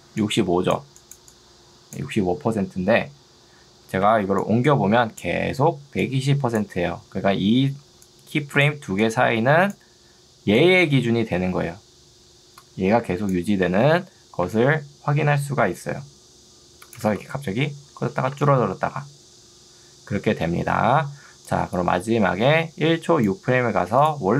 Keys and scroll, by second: 5.7 ctrl+2, 7.3 Escape, 7.9 ctrl+2, 14.5 Escape, 17.1 space.